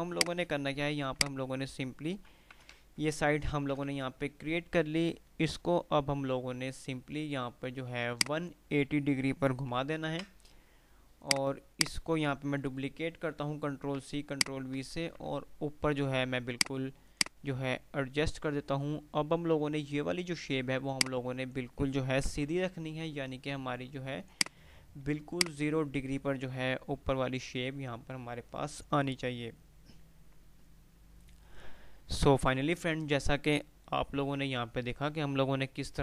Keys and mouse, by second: 1.3-2.5 alt+drag, 2.6 ctrl+g, 3.2 Delete, 3.7 ctrl+z, 4.5 F3, 5.6 typing, 8.6 click, 11.5 click, 14.6 shift+click, 16.6 click, 17.9 typing, 21.0-21.7 drag, 24.5 click, 24.9 F2, 25.5-27.5 drag, 32.2 F9.